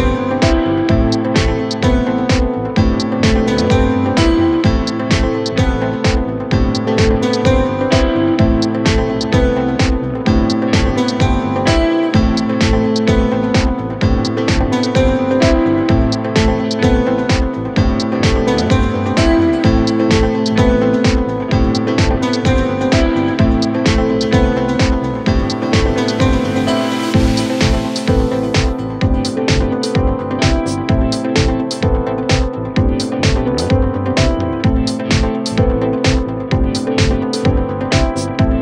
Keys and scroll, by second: 6.1 Delete, 14.9 ctrl+z, 15.1 ], 30.9 F1, 35.3 ctrl+z, 37.0 F9.